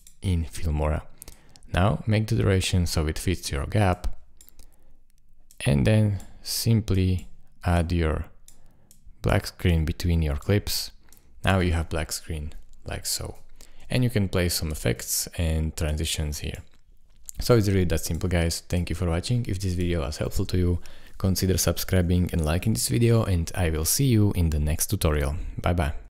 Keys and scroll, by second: 11.6 space, 13.8 space.